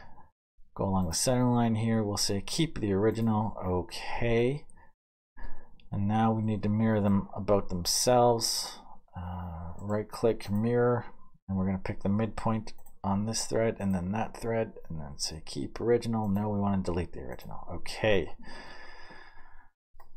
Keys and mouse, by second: 4.2-7.1 middle drag, 14.2-20.1 middle drag.